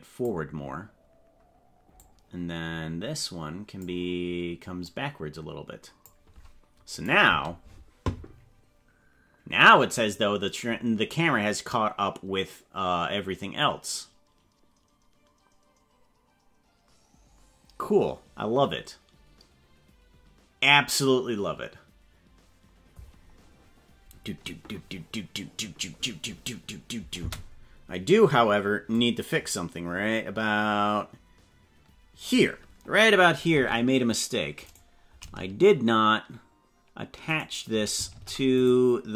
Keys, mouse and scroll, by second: 2.0-3.8 drag, 4.8-6.0 drag, 7.0 click, 7.2 space, 27.2 space, 28.9-32.3 drag, 33.5 ctrl+Tab, 34.6 right click, 37.3 shift+right click, 38.1 ctrl+Tab, 38.6 right click.